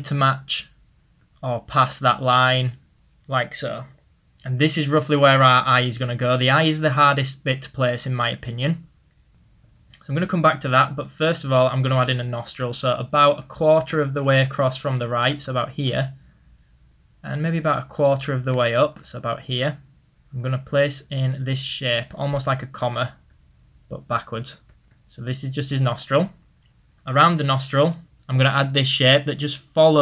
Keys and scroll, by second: 14.0 ctrl+z, 17.2 ctrl+z, 18.1 ctrl+z.